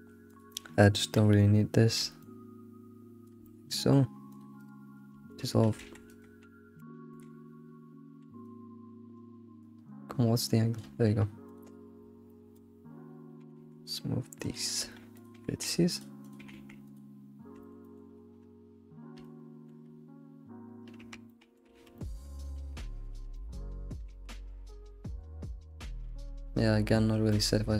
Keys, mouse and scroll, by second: 0.3 click, 0.9 d, 2.2-3.4 shift+drag, 3.4-4.3 middle drag, 4.3 click, 5.1-5.8 right drag, 5.8 ctrl+z, 6.4 right click, 7.9 d, 9.9-11.9 shift+drag, 12.0 alt+middle click, 13.9 g, 16.2 click, 16.7 g, 17.9 alt+middle click, 20.0-20.4 scroll up 1, 21.9-22.9 middle drag, 22.9 alt+shift+z, 23.9 middle click, 24.1 ctrl+s, 24.3-24.8 middle drag, 25.1 alt+middle click.